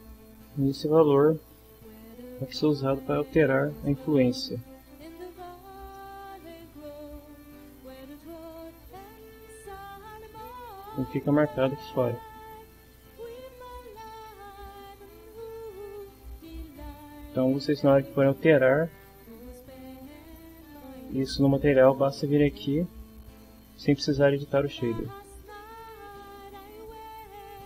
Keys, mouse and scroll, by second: 0.6 click, 1.7 BackSpace, 1.9 2, 2.4 Return, 5.9-7.2 middle drag, 8.2 click, 15.6 click, 18.6 click, 25.1 click, 26.2 click.